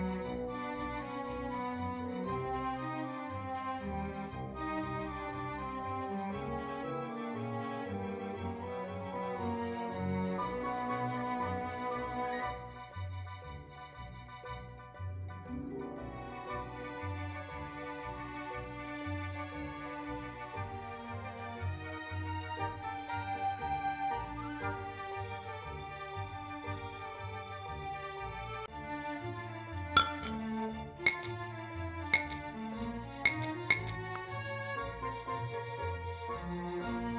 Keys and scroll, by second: 0.0-0.4 typing, 14.9 ctrl+c, 16.9 ctrl+v.